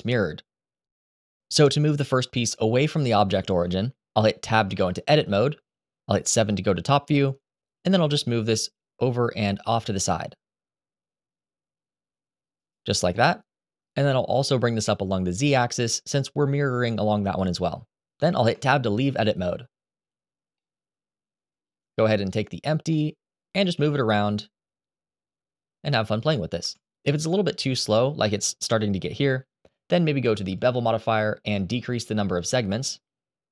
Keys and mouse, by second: 4.5 Tab, 6.1 KP_7, 7.9 g, 12.3 click, 13.7 shift+middle click, 14.5 g, 14.9 z, 17.9 click, 18.4 Tab, 20.3-21.3 middle drag, 22.6-23.2 middle drag, 23.4 g, 26.7 Escape, 30.3 click, 32.0-33.5 drag.